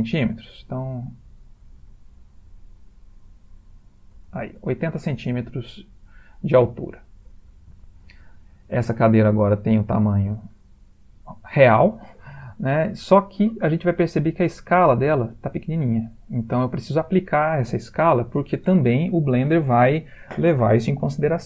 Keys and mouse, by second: 0.2 ctrl+middle click, 1.0 shift+middle click, 1.0 shift+middle click, 1.8 s, 5.7 ctrl+middle click, 6.0 ctrl+middle click, 6.2-6.7 ctrl+middle click, 6.5 ctrl+middle click, 7.0 ctrl+middle click, 7.2 ctrl+middle click, 7.6-9.1 shift+middle click, 8.7 ctrl+middle click, 8.9 ctrl+middle click, 9.6 ctrl+middle click, 10.8 middle click, 11.0 middle click.